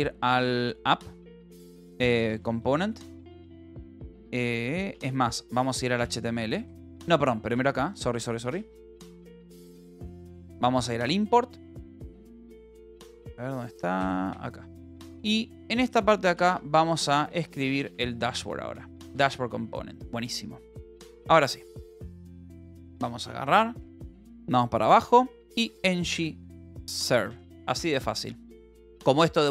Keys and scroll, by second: 0.0-0.4 typing, 1.5-3.3 typing, 4.9 space, 5.5 k, 6.7-10.1 typing, 7.1 Return, 11.7-18.1 typing, 18.7 Return, 19.7 ctrl+s, 22.2 ctrl+b, 23.1 z, 24.0 Down, 25.3-28.0 typing.